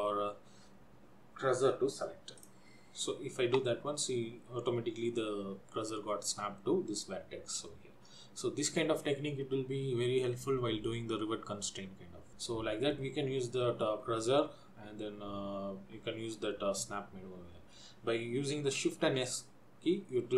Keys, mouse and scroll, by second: 12.4 middle click, 19.2 shift+s.